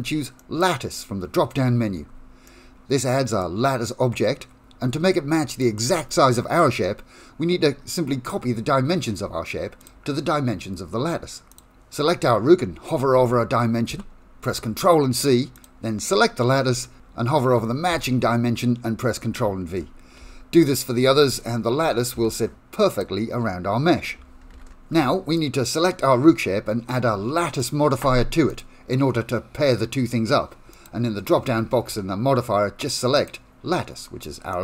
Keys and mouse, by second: 2.6 middle click, 5.6 click, 9.9 click, 11.5 click, 13.9 ctrl+c, 18.0 ctrl+v, 20.3 ctrl+v, 22.2 ctrl+c, 23.0 click, 24.6 ctrl+v, 25.5-26.5 middle drag, 26.7 click, 27.6 click, 28.6-30.9 drag, 33.3-34.6 drag.